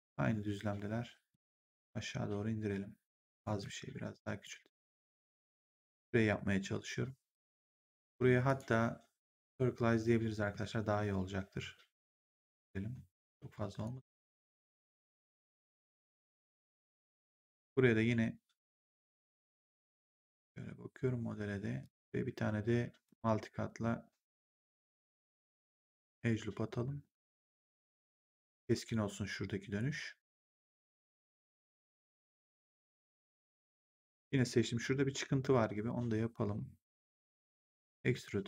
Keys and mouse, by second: 1.2 click, 3.5 r, 4.4 click, 8.4 click, 10.3 r, 12.0 click, 14.9 w, 15.8 click, 21.7 click, 23.0 click, 25.9 ctrl+click, 28.0 ctrl+click, 31.0 w, 33.8 click, 37.6 click, 38.0 r.